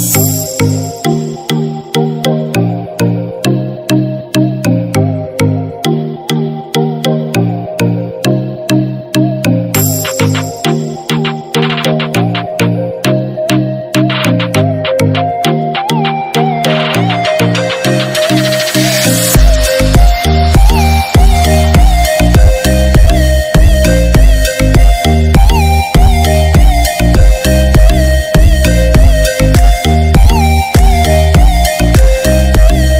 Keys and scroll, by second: 10.8 ctrl+=, 18.4 ctrl+=.